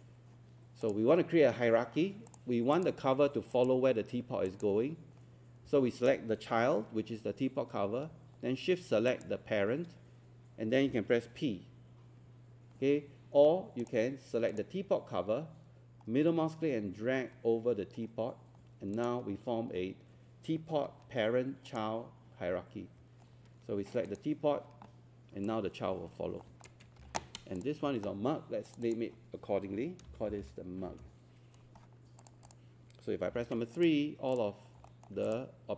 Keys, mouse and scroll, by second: 9.1 shift+click, 13.8 click, 16.3-18.0 middle drag, 18.9-20.0 drag, 20.9 ctrl+1, 21.3 scroll up 1, 21.7 click, 23.0 Escape, 24.1 click, 27.6 click, 30.1-30.4 typing, 30.9 Return, 32.2 click, 33.3 click, 33.8 click, 34.7 scroll down 1, 34.9 alt+middle click, 35.3 click.